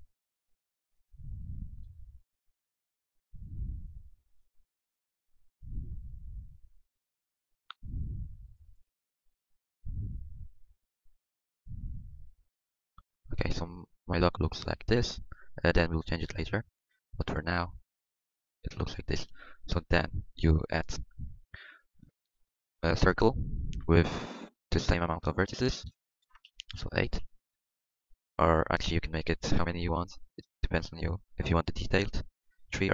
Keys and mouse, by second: 2.5-4.1 middle drag, 3.3-5.3 drag, 3.3 right click, 5.3-6.5 middle drag, 6.5 click, 9.5-11.4 middle drag, 11.4-13.7 drag, 14.8 middle click, 14.9 middle click, 17.7 Tab, 19.0 middle click, 20.2 KP_5, 22.2 KP_5, 22.3 shift+a, 24.8-32.9 drag.